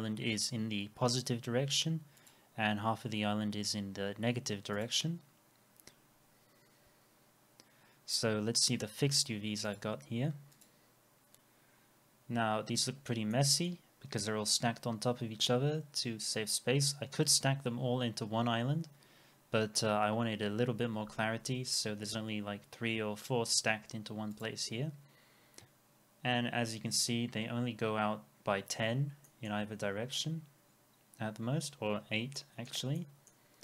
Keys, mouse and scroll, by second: 11.8 scroll down 1, 13.3 middle click, 25.3 scroll up 1, 28.8 scroll down 1, 29.3 middle click, 29.6-30.0 scroll up 1, 31.9 scroll down 1, 32.4 middle click.